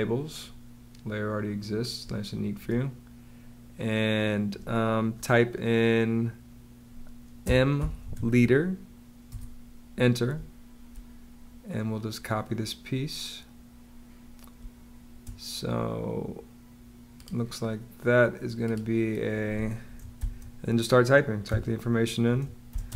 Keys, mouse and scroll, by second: 1.9 space, 7.0-8.5 typing, 9.2 Return, 10.2 space, 14.4 space, 20.0 9, 21.3 2, 22.6-22.9 typing.